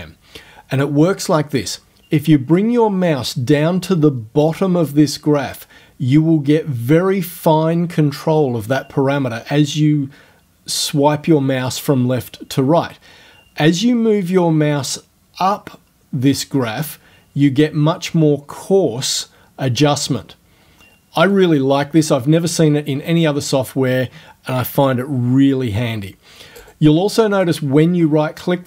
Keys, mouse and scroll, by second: 21.4 click, 26.6 right click, 27.4 right click.